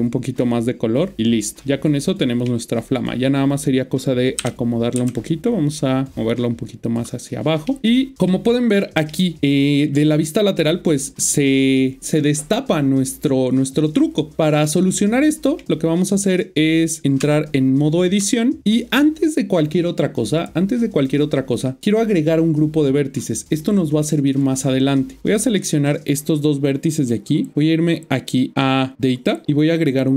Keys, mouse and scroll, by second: 1.6 middle click, 2.8 click, 4.3 g, 6.8 click, 7.6 middle click, 11.2 click, 14.0 click, 14.6 middle click, 24.3 click.